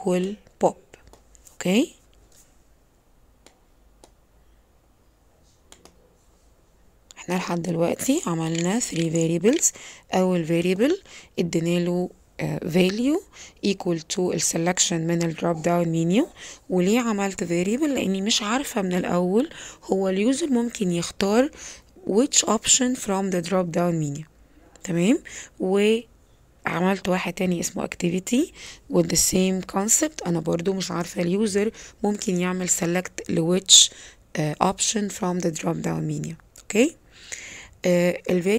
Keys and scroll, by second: 8.5 p, 8.9 o, 9.4 p.